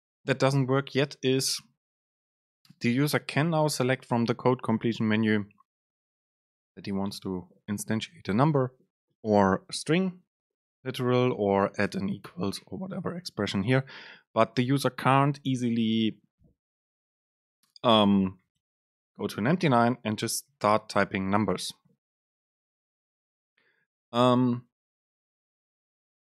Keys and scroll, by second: 1.8 BackSpace, 3.4 super+space, 13.3 shift+Right, 13.7 BackSpace, 18.7 BackSpace, 19.2 Return.